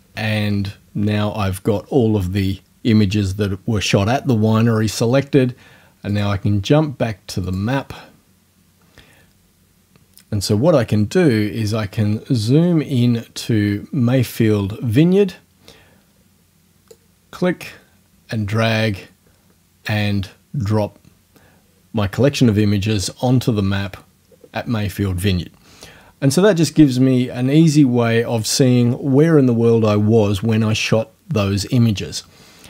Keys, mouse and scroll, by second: 6.1 click, 7.5 click, 11.8 scroll up 2, 16.9-20.0 drag, 26.7 scroll down 2.